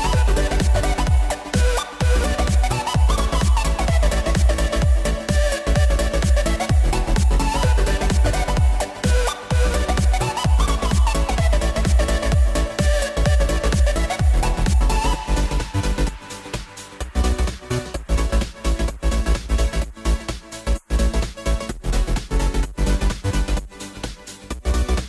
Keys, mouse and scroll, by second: 0.4 s, 2.1 click, 3.0 click, 3.3 scroll down 1, 3.6 shift+a, 5.5 s, 7.2 s, 9.4 click, 10.7-11.5 drag, 12.2 click, 13.1 shift+a, 16.2-17.8 drag, 17.8-18.4 shift+middle drag, 18.4 click, 18.7 scroll down 1, 18.9-20.5 middle drag, 20.5 click, 21.0 KP_1, 21.7 Tab, 21.9-23.3 scroll up 1, 23.3 ctrl+r.